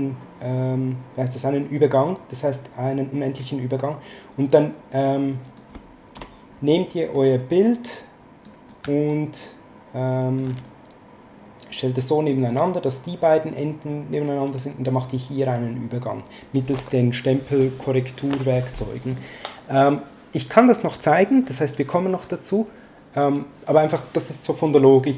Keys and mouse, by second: 5.5 click, 6.1 BackSpace, 7.1 click, 8.7 click, 10.6 ctrl+click.